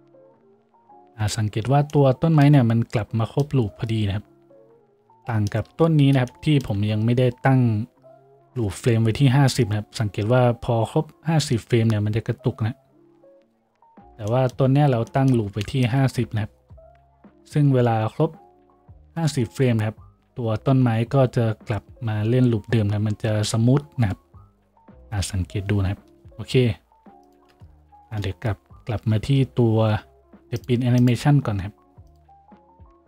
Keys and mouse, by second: 28.0 F5, 29.0 F6.